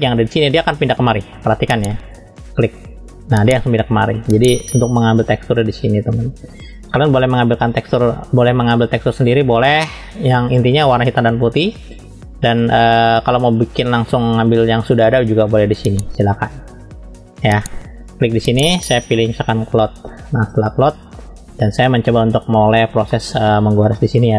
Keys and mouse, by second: 23.1 middle click.